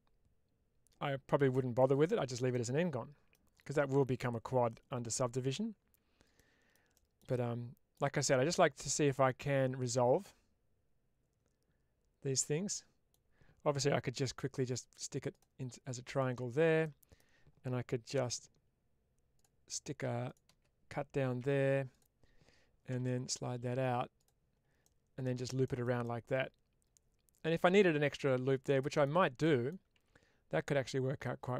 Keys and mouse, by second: 2.4-3.2 middle drag, 6.2 middle click, 7.2 middle click, 8.4-13.0 middle drag, 16.7 middle click, 18.0 k, 21.3 1, 21.8-24.1 drag, 24.7 middle click, 25.9-27.4 middle drag, 28.0 middle click, 29.3 middle click.